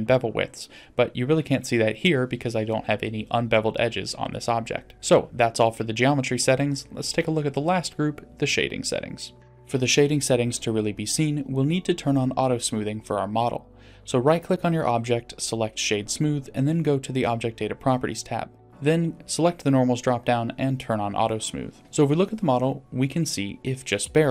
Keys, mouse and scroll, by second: 0.7 click, 2.0 click, 2.7 click, 4.9-5.9 drag, 10.6 click, 13.0-13.7 middle drag, 15.5-16.7 right drag, 18.9 click, 19.9 click, 20.8-21.4 middle drag, 21.8 scroll down 1, 23.0 click, 23.2 middle click, 23.8-24.3 scroll down 2.